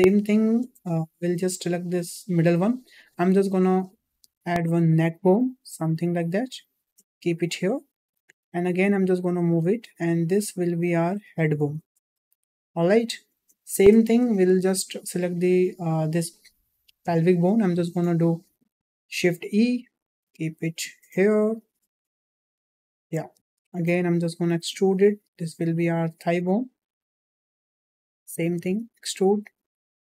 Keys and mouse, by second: 1.1 shift+middle click, 1.8 click, 3.3 e, 8.9 e, 13.4 shift+middle click, 14.3 shift+middle click, 15.0 click, 17.7 shift+e, 23.6 shift+middle click, 24.5 e, 28.3 shift+middle click, 28.7 e.